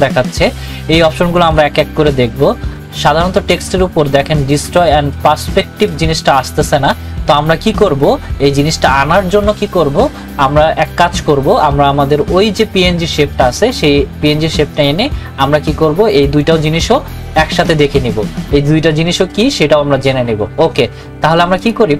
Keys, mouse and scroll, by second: 21.6 click.